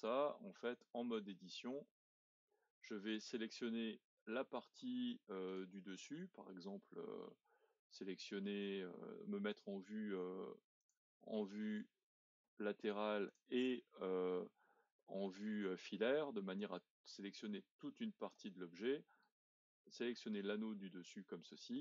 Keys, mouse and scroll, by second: 0.8 Tab, 1.4-5.4 middle drag, 5.4 click, 6.0-10.8 middle drag, 10.8 click, 11.3-13.3 middle drag, 13.3 click, 14.2 scroll up 2, 16.6 click, 19.0 middle click, 19.9-20.8 scroll down 7, 20.8 middle click, 21.5-21.8 scroll up 1.